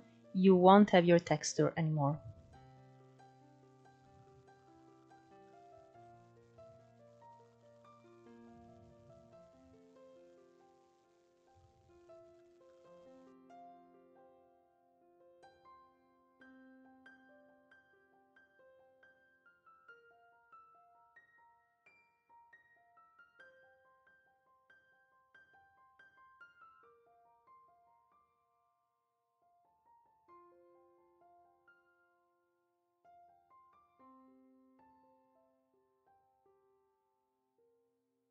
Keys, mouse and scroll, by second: 2.4-3.2 scroll down 2, 3.2-6.5 drag, 11.5-13.4 drag, 13.7 click, 14.6 click, 15.5 scroll down 2, 15.7 middle click, 15.9-17.5 scroll up 10, 16.0 middle click, 16.3 shift+middle click, 16.6 shift+middle click, 17.6 scroll down 1, 17.7-19.1 drag, 19.1 scroll down 1, 19.3 middle click, 19.6 scroll up 2, 20.3 drag, 21.8-23.5 drag, 24.0 click, 26.0 click, 26.6 middle click, 26.8 click, 27.6 middle click, 27.9 scroll up 1, 28.0 click, 28.5 middle click, 29.1 f, 29.4 scroll up 1, 29.6 click, 29.8 middle click, 30.1 scroll up 1, 30.3 click, 30.6 middle click, 31.1 click, 31.8 middle click, 32.0 scroll up 1, 32.2 click, 32.4-33.4 middle drag, 33.4 click, 33.6 middle click, 33.8 scroll up 2, 34.0 click, 34.5 ctrl+z, 34.7 click, 35.4 scroll down 3, 35.5 middle click, 36.7 shift+middle click, 37.2 click, 37.4 middle click, 38.2 scroll up 1.